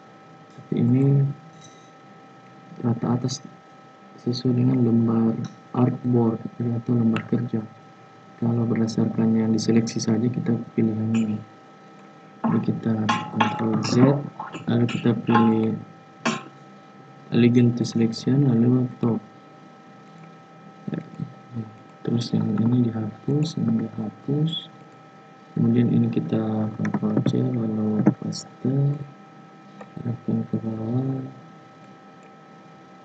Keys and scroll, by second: 13.8 ctrl+z, 27.1 ctrl+c, 27.9 ctrl+f.